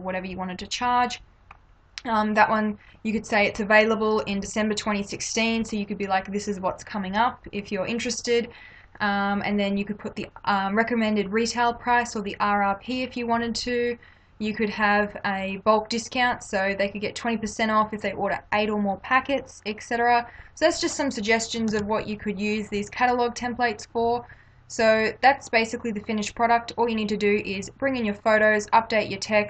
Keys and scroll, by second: 21.7 ctrl+-.